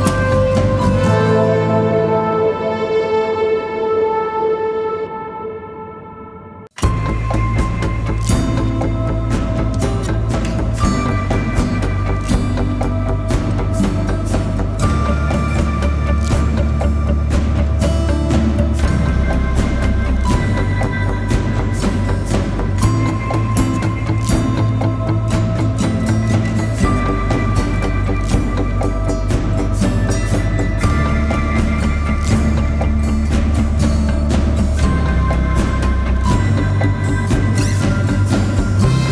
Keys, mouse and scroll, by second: 34.2 e.